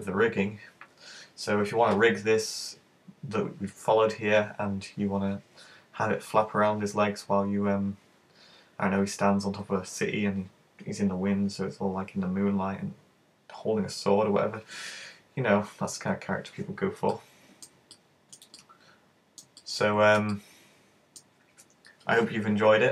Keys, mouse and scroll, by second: 15.5-16.0 scroll down 3, 16.0-17.1 scroll up 2, 17.1 middle click, 17.1 scroll up 1, 18.0 shift+middle click, 18.7 middle click, 19.6 shift+middle click, 20.4 middle click, 21.3 alt+scroll up 1.